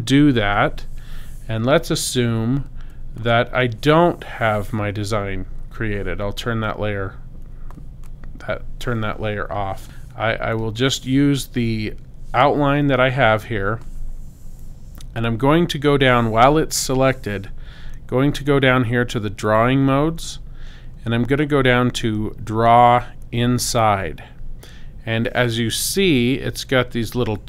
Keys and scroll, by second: 0.1 super+z.